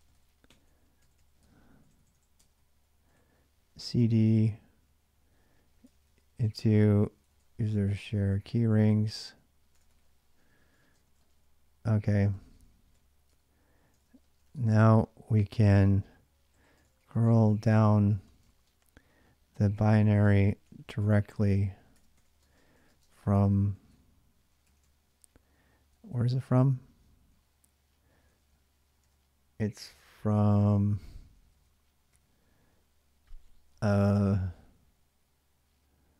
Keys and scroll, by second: 0.0-3.6 typing, 3.9 ctrl+a, 4.1 ctrl+a, 5.7 ctrl+a, 5.8 ctrl+a, 6.5-14.7 typing, 16.3-23.9 typing, 24.4 ctrl+a, 24.6 ctrl+a, 25.6 ctrl+a, 25.8 ctrl+a, 28.0 ctrl+a, 28.5-29.3 typing, 31.0-32.4 typing.